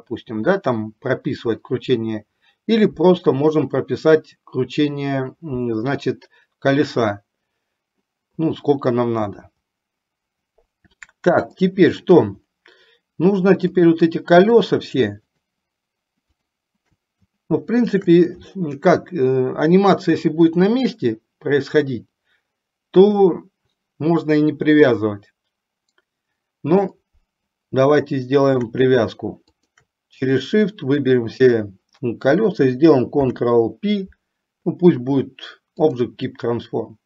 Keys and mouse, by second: 11.9-12.4 shift+middle drag, 13.9 click, 15.4 shift+click, 16.5 shift+click, 29.7 shift+click, 33.3 ctrl+p.